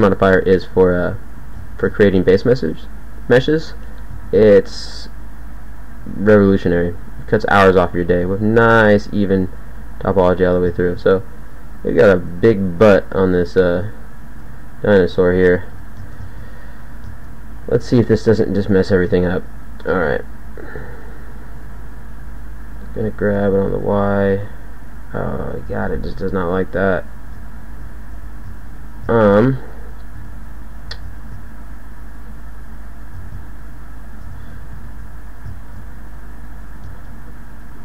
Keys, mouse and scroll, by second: 0.2 e, 1.2 click, 1.8 ctrl+a, 4.2 ctrl+a, 5.3-8.7 typing, 14.4 Tab, 15.0 z, 15.8 Tab, 17.5 a, 17.9 a, 18.1 a, 18.8 s, 19.9 a, 20.1 a, 20.8 b, 21.7 b, 23.4 g, 25.6 z, 27.5 z, 27.8 z, 28.4 z, 31.2 ctrl+a, 33.2 ctrl+a, 34.3 z, 34.5 z, 34.7 z.